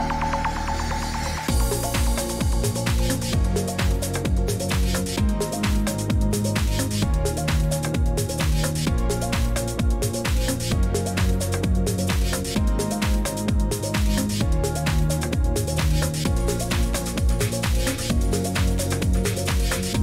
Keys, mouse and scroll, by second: 0.0-20.0 typing, 9.0 Escape, 12.1 click, 12.6 click, 16.7 click, 18.6 click, 19.0 click, 19.5 click, 19.7 Escape.